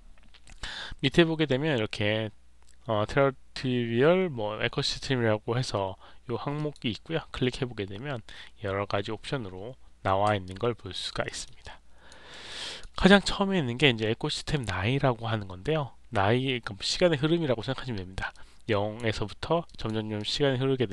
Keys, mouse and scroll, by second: 0.9 click, 6.5 click, 10.4 alt+click, 11.2 alt+middle click, 11.6 alt+click, 12.2 alt+middle click, 12.6 alt+click, 18.2 click, 19.6 click, 20.1-20.9 drag.